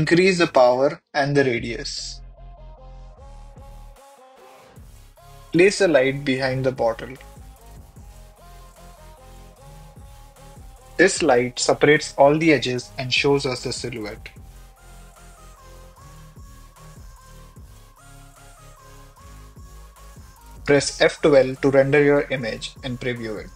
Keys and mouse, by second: 0.6 click, 1.1 KP_0, 2.8-5.2 drag, 5.3 click, 6.7 g, 6.8 y, 10.5 click, 11.5 click, 12.1 KP_0, 13.3 click, 14.8-17.0 drag, 17.1 middle click, 18.0-19.7 typing, 22.6 click.